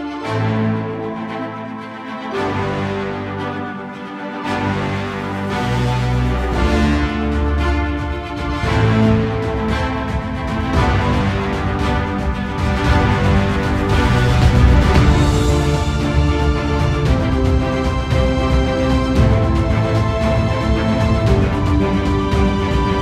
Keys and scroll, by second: 15.0 alt+space, 18.8 space, 21.3 alt+space.